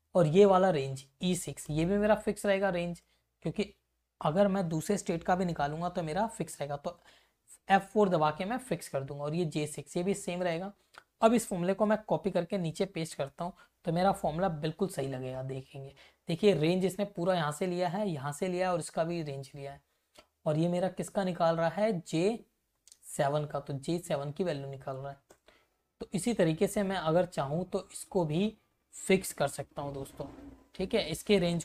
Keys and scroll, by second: 0.3 Left, 1.6 shift+Right, 7.6 F4, 8.8 Right, 10.1 Return, 10.6 Up, 11.8 ctrl+c, 12.2 Down, 12.5 v, 14.1 F2, 26.4 Up, 26.9 Right, 27.1 Up, 30.2 Left.